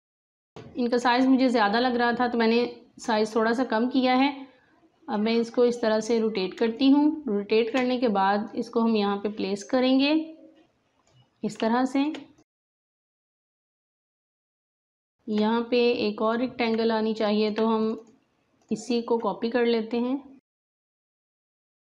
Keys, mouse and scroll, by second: 0.2-4.1 drag, 5.1 click, 5.1-6.6 drag, 6.6 space, 6.7 click, 7.1 space, 8.4 click, 8.5-11.5 drag, 11.5 space, 11.6 click, 12.1 space, 12.3 click, 14.1 alt+scroll up 2, 14.4 space, 14.6 click, 15.0 space, 16.2-21.3 drag, 21.3 alt+click.